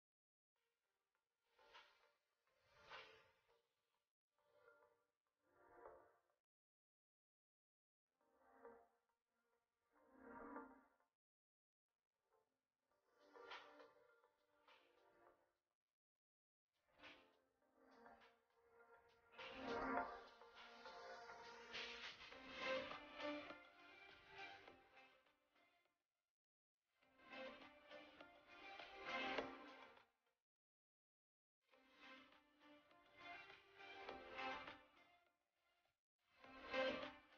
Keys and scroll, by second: 6.9 Escape, 13.2 Escape, 14.6 space, 25.0 shift+space, 28.6 shift+space.